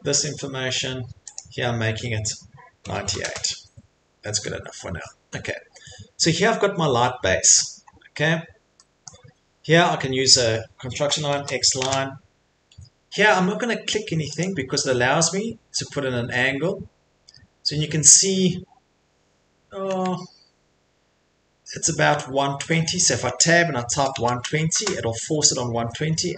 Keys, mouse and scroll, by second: 1.3 click, 2.6-3.5 typing, 4.1 Escape, 4.3 Escape, 4.5 middle click, 4.6 middle click, 5.0 middle click, 7.8 middle click, 7.9 middle click, 8.8 Return, 9.5 middle click, 11.1-12.5 typing, 13.2 middle click, 13.2 middle click, 14.5 click, 15.0 middle click, 15.0 middle click, 15.1 middle click, 15.2-16.0 typing, 15.7 middle click, 15.8 middle click, 22.6 Tab, 23.7-24.9 typing.